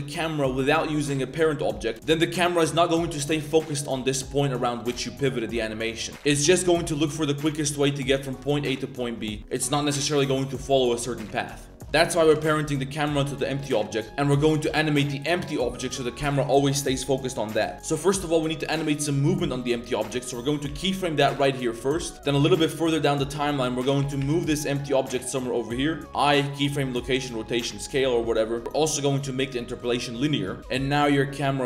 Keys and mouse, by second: 1.9 KP_0, 2.0 space, 5.0 space, 6.0 click, 6.7 space, 7.1 middle drag, 7.3 click, 9.4 space, 11.3 click, 12.3 ctrl+p, 13.3 click, 13.7 click, 13.9 click, 18.0-19.1 drag, 22.4-23.4 drag, 27.8-28.6 drag, 28.6 space, 30.3 drag, 30.6 space, 30.7 space.